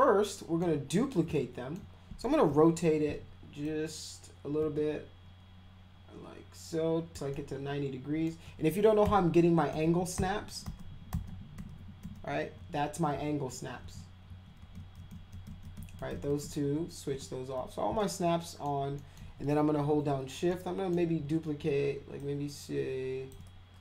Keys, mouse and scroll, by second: 1.3 alt+middle click, 2.5 e, 3.6-7.1 drag, 7.3 alt+middle click, 9.0-17.1 typing, 18.0 alt+middle click, 19.0 alt+middle click, 19.8 w, 20.5 alt+middle click, 22.2-23.3 shift+drag.